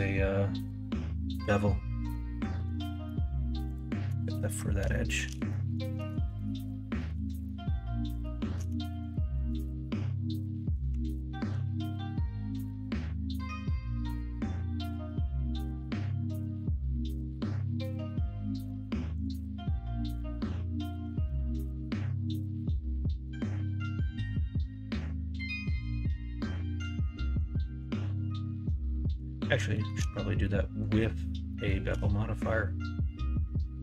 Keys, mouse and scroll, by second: 2.7 alt+z, 6.7 middle click, 7.1 ctrl+z, 9.8 middle click, 11.3 ctrl+b, 19.7 middle click, 21.4 middle click, 26.3 middle click, 27.5 shift+middle click, 28.2-29.3 middle drag, 29.7 shift+middle click, 30.4 middle click, 31.4 shift+middle click.